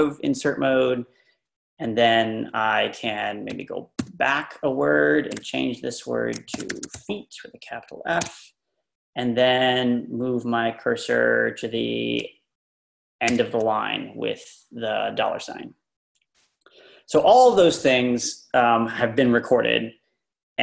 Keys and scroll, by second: 3.5-4.0 typing, 5.2-7.4 typing, 8.2 Escape, 13.3 shift+4.